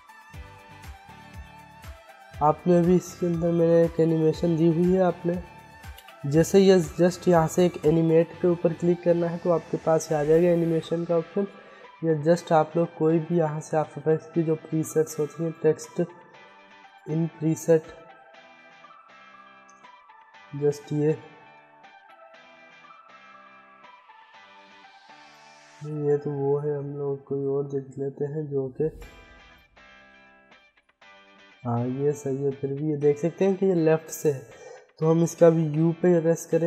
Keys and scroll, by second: 0.2 ctrl+z, 5.1 Delete, 24.0 ctrl+z, 33.5 u, 35.2 ctrl+z.